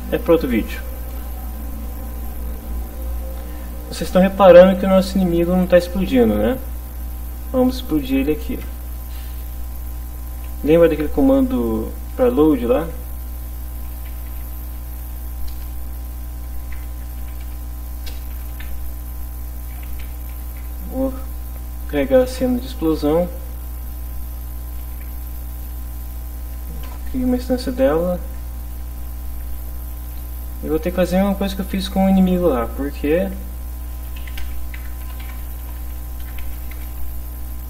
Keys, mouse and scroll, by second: 2.5 Up, 7.6 End, 8.6 Return, 9.9 Return, 12.3-18.5 typing, 19.6-20.7 typing, 22.3 n, 22.9 ., 23.3 shift+0, 23.7 shift+., 24.7 i, 24.9 n, 26.1 Down, 26.9 Return, 28.7 shift+0, 29.2 shift+Right, 29.5 Left, 30.1 Home, 33.9-36.7 typing, 37.4 End.